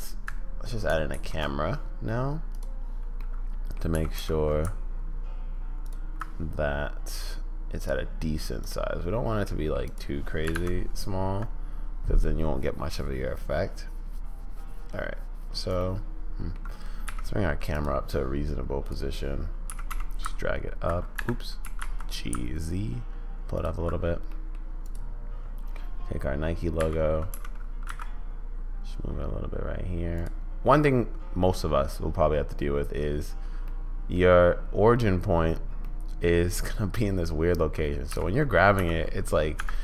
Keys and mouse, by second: 1.1 shift+a, 3.2-3.8 middle drag, 3.9 g, 7.3-8.8 drag, 9.4 drag, 9.8 click, 16.0-16.6 middle drag, 17.0 g, 18.8 click, 19.7 g, 21.6 g, 24.5 click, 26.8 g, 33.7-34.3 middle drag, 36.0 middle click, 38.1 g.